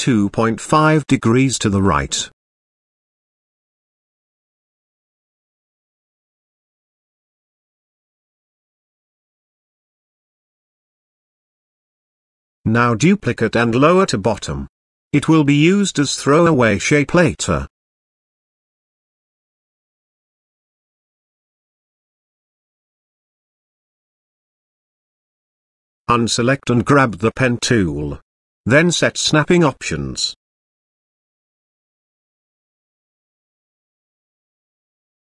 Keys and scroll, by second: 5.4 2, 5.9 ., 6.4 5.